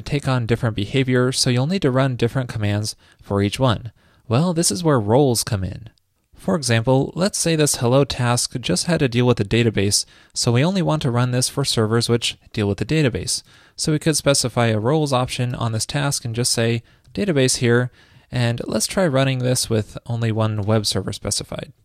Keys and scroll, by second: 21.0 super+s.